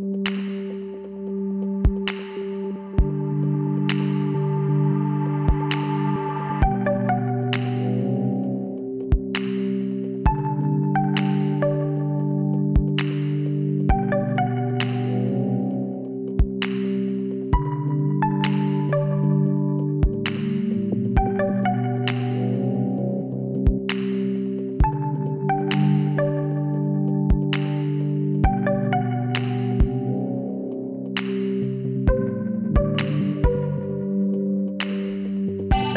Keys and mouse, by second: 1.6-5.1 drag, 1.8 b, 6.8-9.5 middle drag, 9.5 click, 11.0 middle click, 11.3 click, 12.1 shift+s, 14.2 z, 15.2 shift+a, 19.1 t, 20.1-21.8 drag, 22.7-24.3 middle drag, 24.3-25.4 drag, 24.3 s, 26.8-29.6 middle drag, 27.9 r, 30.4 click, 30.9 KP_1, 32.3 r, 34.0 s.